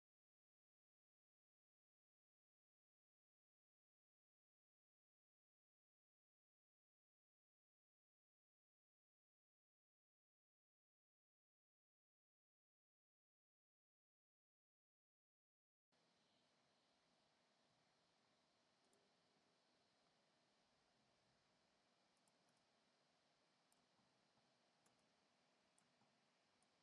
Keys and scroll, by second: 15.9 super+`, 20.2 super+c, 22.6 space.